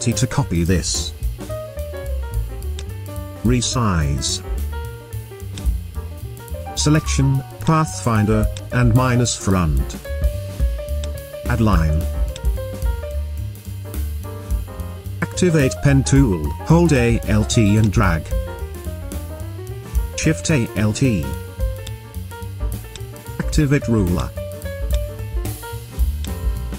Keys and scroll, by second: 14.3 v, 15.9 p, 22.7 v.